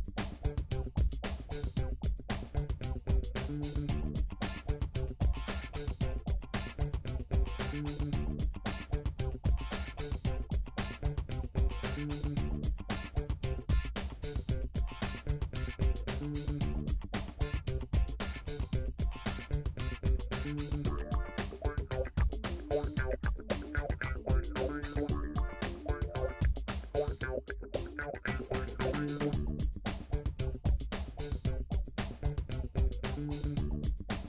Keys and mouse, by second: 4.7 x, 10.4 click, 10.7 shift+middle click, 11.0 shift+click, 11.1-12.5 shift+middle drag, 12.5 m, 14.8 click, 15.5 click, 15.9 shift+click, 16.1 m, 17.2-19.7 shift+middle drag, 19.7 shift+click, 20.2 m, 20.6-21.5 middle drag, 21.5 click, 21.6 shift+middle click, 22.0 shift+click, 22.1-24.1 shift+middle drag, 22.3 m, 24.1 Tab, 25.7 Tab, 26.3-29.1 middle drag, 29.1 click, 29.6 shift+click, 31.0 f, 31.6 click, 32.1 shift+click, 32.4 f, 32.9-34.2 middle drag, 33.1 f, 34.1 f.